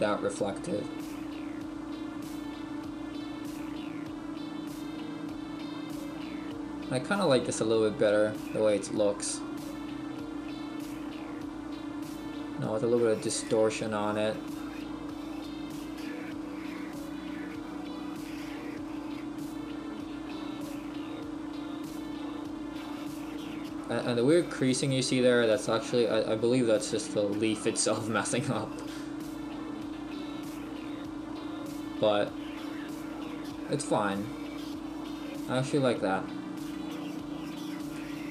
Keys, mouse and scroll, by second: 6.5-7.5 scroll up 2, 13.4 middle click, 29.6-30.3 scroll down 1, 30.3 scroll down 5, 34.8-35.1 scroll up 1, 37.1-38.0 scroll down 3, 38.0 shift+middle click, 38.0-38.3 scroll down 4.